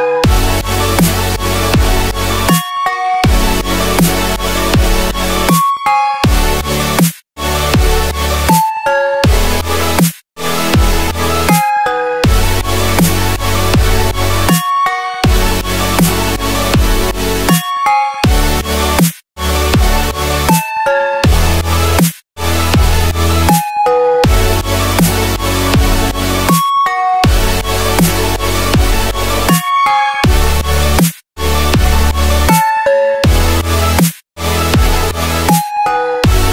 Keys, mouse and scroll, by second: 2.0 typing, 3.9 typing, 5.2 typing, 11.0 ctrl+shift+g, 13.2-19.4 drag, 30.8 click.